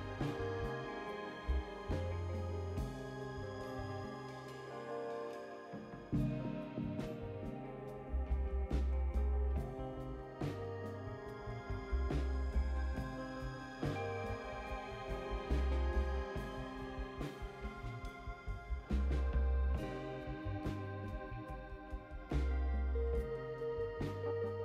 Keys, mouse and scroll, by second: 2.5 click, 4.1 click, 4.9 click, 6.0 click, 6.6 click, 8.0 click, 8.5 space, 9.8 click, 10.7 space, 12.0 click, 12.5 space, 13.7 click, 23.8 click.